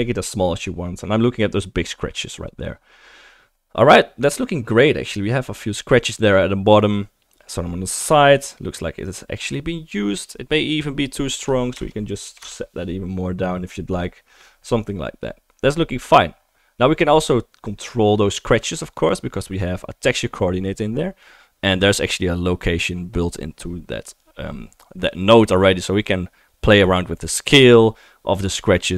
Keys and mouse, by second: 4.4-8.6 drag, 4.4-16.4 middle drag, 4.4-16.4 right drag, 10.7-16.4 drag, 18.8-20.4 drag, 20.4-28.9 right drag.